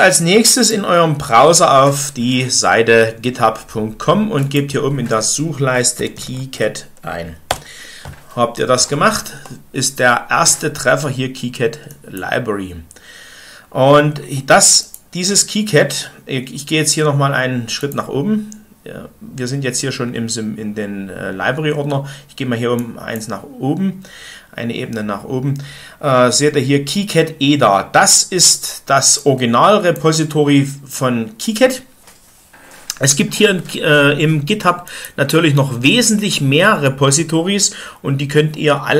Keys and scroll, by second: 5.6-7.0 typing, 7.4 Return.